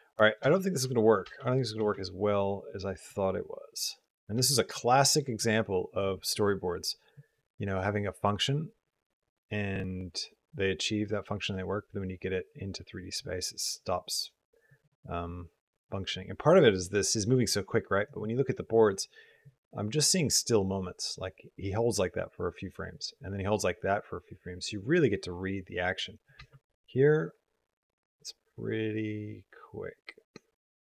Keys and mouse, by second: 0.2 click, 0.3 space, 1.2 space, 1.3 click, 1.6 space, 2.9 click, 4.6 click, 4.6 space, 5.3 click, 7.0-17.9 drag, 19.3-26.2 drag, 26.2 space.